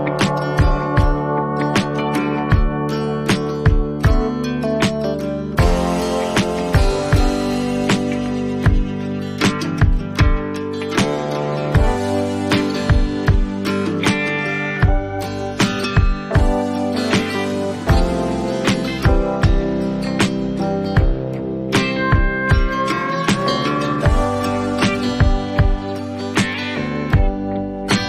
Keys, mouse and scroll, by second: 1.9 click, 5.2 click, 7.0 ctrl+t, 12.4 shift+click, 13.8 shift+click, 15.2 shift+click, 16.6 shift+click, 17.8 click, 20.3 shift+click, 20.7 click, 21.2 click, 21.3 click, 22.2 shift+click, 25.1 ctrl+j, 27.4 ctrl+t.